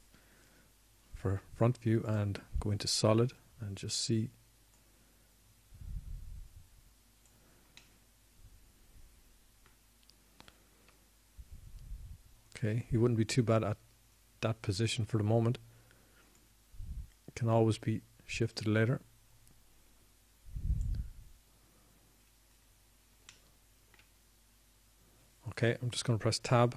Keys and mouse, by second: 2.2 KP_1, 4.3 z, 11.1-12.5 middle drag, 14.1 KP_1, 19.7-23.3 drag, 24.5-26.7 middle drag.